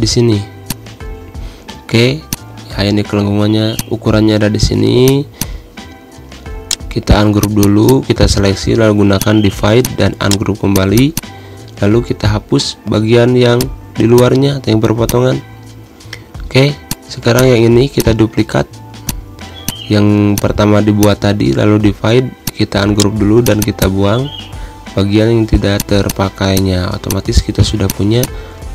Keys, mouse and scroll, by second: 1.4 e, 2.5-5.2 drag, 5.4 space, 5.6 click, 5.7 space, 6.3 v, 6.9 right click, 7.6-9.4 drag, 10.5 right click, 10.9-12.5 drag, 12.5 Delete, 13.8 click, 14.2 space, 14.3 click, 14.5 space, 15.2 click, 17.1-22.6 drag, 23.2 right click, 23.6-25.4 drag, 25.4 Delete, 26.0 click, 26.5 Delete, 26.8 click, 27.0 Delete, 27.3 click.